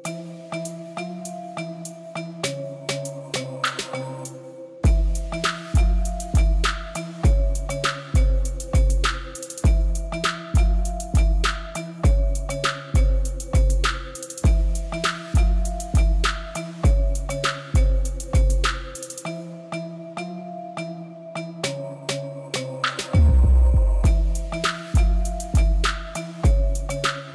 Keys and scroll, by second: 0.0-0.8 typing, 1.5 Return, 5.2 5, 5.4 Return, 7.4 Tab, 8.1 Tab, 9.3 a, 14.6 g, 16.2 Tab, 23.0 Tab, 25.2 2, 26.7 ctrl+b, 26.9 ., 27.0 0.